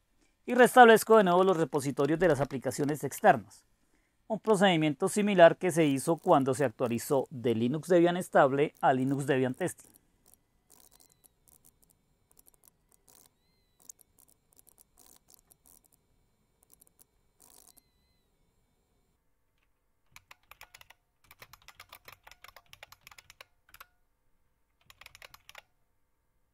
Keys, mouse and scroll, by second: 0.0-16.1 typing, 12.3 ctrl+o, 12.4 Return, 12.6 ctrl+x, 16.7 ctrl+o, 16.8 Return, 17.0 ctrl+x, 17.4-18.1 typing, 19.9-26.0 typing.